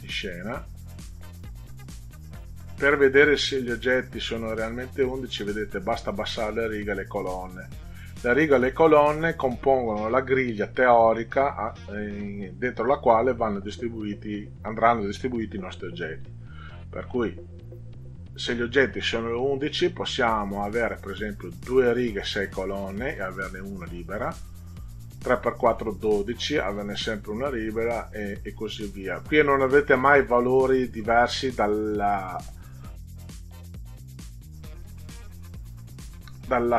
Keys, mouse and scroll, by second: 3.7 click, 4.0 click, 4.4 click, 20.6 click, 24.3 click, 27.6 click, 29.8 click.